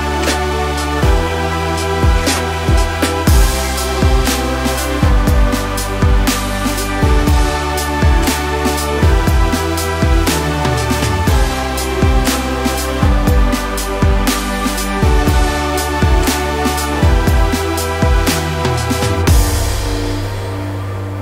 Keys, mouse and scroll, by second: 1.3 click, 1.7 Tab, 2.7-4.9 shift+middle drag, 2.9-3.6 scroll up 2, 3.6 ctrl+KP_Add, 4.1 Tab, 4.9 click, 5.5-6.9 drag, 5.8 Tab, 7.0-9.1 drag, 7.7 Return, 9.2-10.8 drag, 10.1 KP_Enter, 10.9-11.3 scroll down 2, 11.3-12.5 middle drag, 12.2 scroll up 2, 12.4 Tab, 12.5 click, 13.0-14.5 drag, 13.6 Tab, 14.9 click, 15.4 click, 16.4 click, 17.7-19.7 drag, 18.6 KP_Enter, 18.8 Tab.